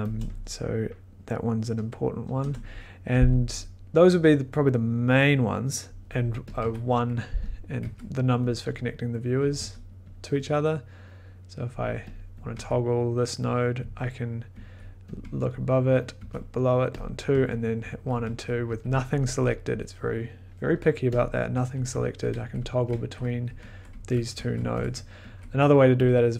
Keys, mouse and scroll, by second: 0.1 click, 2.3 BackSpace, 6.5 click, 6.6 1, 7.4 click, 7.8 2, 8.5 click, 8.6 1, 9.4 click, 9.5 2, 9.9 click, 10.0 click, 10.1 click, 11.7 click, 12.1 click, 12.4 click, 12.5 1, 13.5 click, 13.8-19.1 typing, 15.1 click, 16.1 click, 17.0 click, 21.2 click, 21.5-25.0 typing, 22.5-23.6 drag, 23.9 click, 24.3 click, 26.0 click.